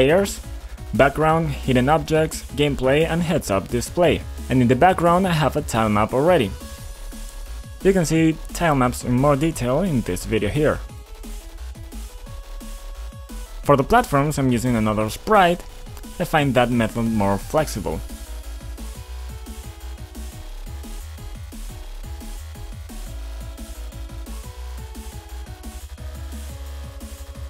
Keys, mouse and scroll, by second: 0.0 click, 3.9 click, 5.0 click, 5.6 click, 6.9 click, 7.3 click, 7.4 double click, 7.9 double click, 11.8 click, 13.6 click, 13.9 click, 14.7 click, 14.9 right click, 15.4 double right click, 15.4 click, 15.8 click, 16.1-16.5 scroll down 2, 16.5 click, 16.8 click, 17.3-19.0 typing, 19.4 Return, 20.2 click, 21.2 click, 21.5-22.7 typing, 24.0 click, 26.4 click, 27.3 click.